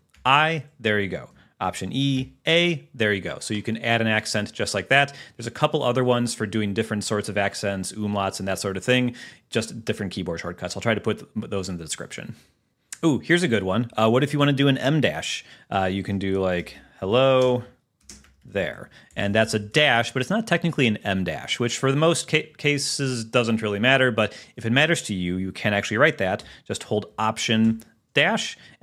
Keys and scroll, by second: 0.4 i, 1.8 alt+e, 12.7 super+h, 17.5 space, 18.9 e, 19.3 Left, 26.5 BackSpace, 27.8 alt+-.